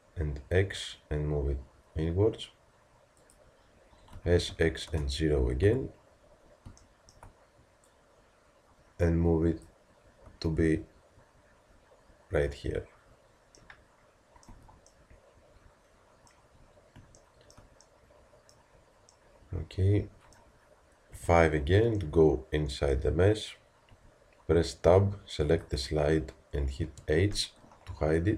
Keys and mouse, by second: 6.9 middle click, 7.9-13.6 drag, 14.5 z, 21.2 KP_5, 23.9 Tab, 26.9 h.